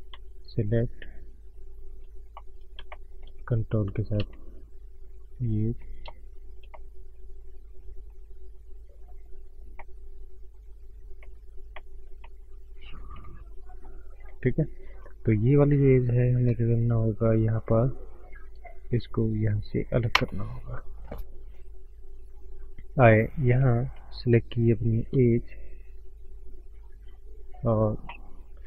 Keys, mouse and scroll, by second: 0.0 click, 0.3 shift+click, 1.3 click, 2.0-2.3 scroll up 2, 2.3 middle click, 2.9 shift+middle click, 3.6 ctrl+z, 4.4 shift+click, 5.1 shift+click, 5.3 shift+click, 5.6 scroll down 1, 5.8 middle click, 6.3 shift+click, 6.6 middle click, 7.6 click, 9.8 middle click, 10.7 click, 11.0 scroll down 2, 11.2 middle click, 11.7 middle click, 12.1 middle click, 12.5 scroll up 1, 13.0 middle click, 14.5 scroll up 1, 25.5 click, 25.9 right click.